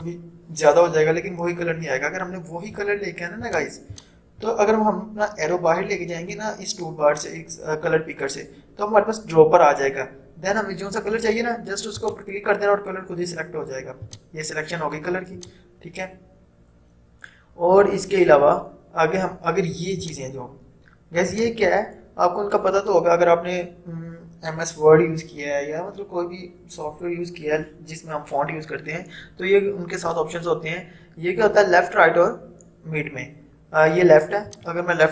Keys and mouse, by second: 3.5-6.9 drag, 12.0 click, 20.1 click, 34.5 click.